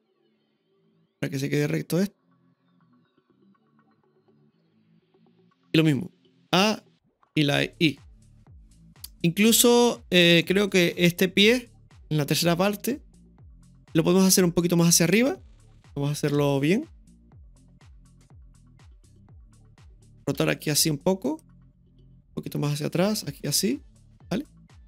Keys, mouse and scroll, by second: 6.5 a, 7.9 i, 9.5-10.4 middle drag, 11.9 click, 12.9-14.0 middle drag, 15.0 right click, 16.3 ctrl+KP_3, 18.0-20.0 drag, 21.3 r, 22.2-24.8 drag.